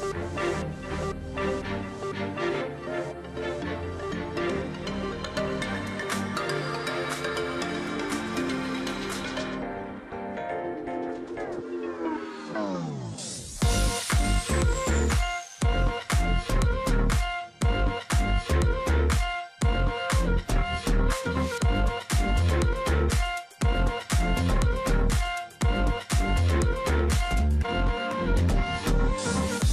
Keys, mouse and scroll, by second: 1.2 ctrl+z, 4.6 ctrl+click, 4.8-5.4 alt+scroll down 1, 5.4 space, 5.7-6.3 alt+scroll up 1, 7.1 space, 8.4 alt+scroll down 1, 8.7-9.0 alt+scroll up 1, 9.0 space, 9.3 ctrl+z, 10.1 space, 11.6 space, 12.4 ctrl+click, 13.5-13.9 alt+scroll down 1, 13.9 ctrl+click, 14.4 alt+scroll down 1, 15.5 ctrl+alt+click, 18.4 alt+click, 18.8-19.1 alt+scroll down 1, 19.1 ctrl+click, 19.2 space, 21.4 shift+click, 23.9-25.1 scroll down 1, 25.5 scroll down 1, 27.5 BackSpace, 29.6-29.7 alt+scroll down 2.